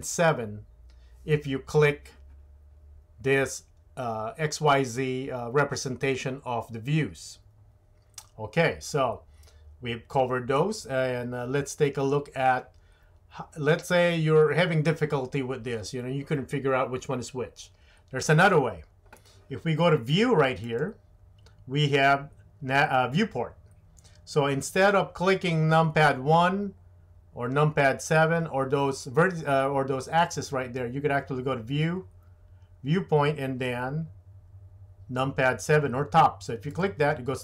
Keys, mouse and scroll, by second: 20.6-36.8 drag.